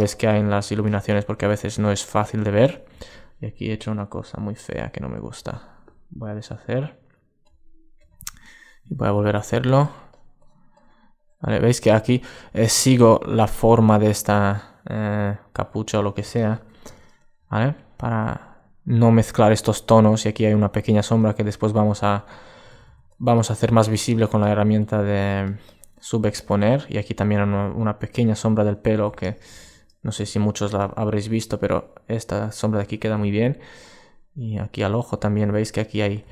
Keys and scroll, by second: 35.1 super+space.